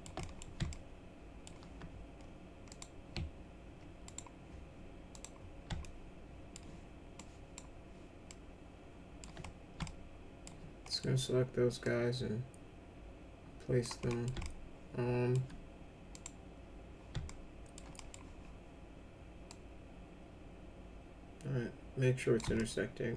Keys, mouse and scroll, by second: 0.2 middle click, 0.7 alt+middle click, 2.7 click, 4.0 right click, 5.1 click, 5.8 alt+middle click, 7.1 alt+click, 8.3 alt+middle click, 9.8 alt+middle click, 10.9 middle click, 11.8-13.8 drag, 14.1 middle click, 14.4 alt+middle click, 16.1 click, 17.2 alt+middle click, 17.9 middle click, 19.5-22.4 drag, 22.5-23.1 alt+middle drag.